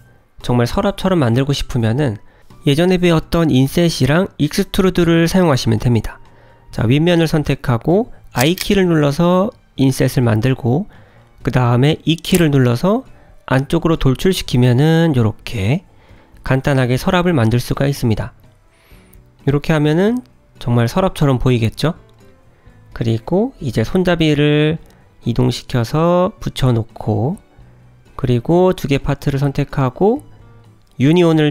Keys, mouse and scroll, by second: 0.8 g, 2.5 middle click, 4.2 click, 4.6 click, 4.9 Tab, 7.3 click, 9.2 i, 12.6 middle click, 13.3 e, 14.9 middle click, 17.9 Tab, 18.8 g, 23.9 click, 24.8 g, 30.0 shift+click.